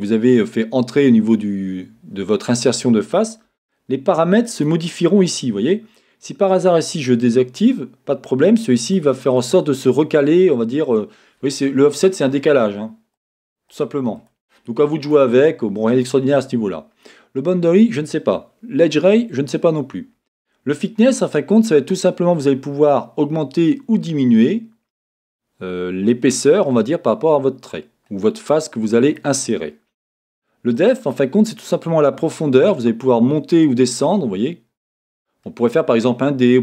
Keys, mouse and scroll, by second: 4.5 click, 7.6 click, 8.8 click, 9.4 click, 13.2 click, 13.7 click, 14.2 click, 15.0 click, 15.9 click, 21.0-36.6 drag.